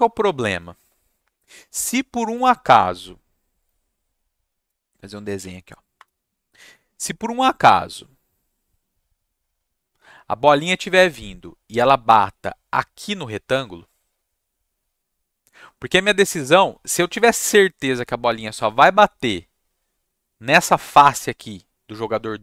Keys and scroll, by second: 5.4 Right, 5.9 Return.